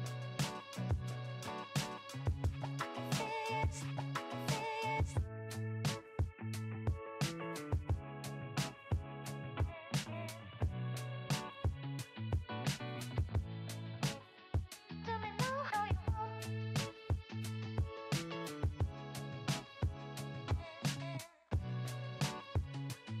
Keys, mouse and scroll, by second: 0.1 click, 0.4-3.2 drag, 12.1 n, 15.4 click, 16.5 Tab, 20.1 click, 21.2 click, 23.0 e.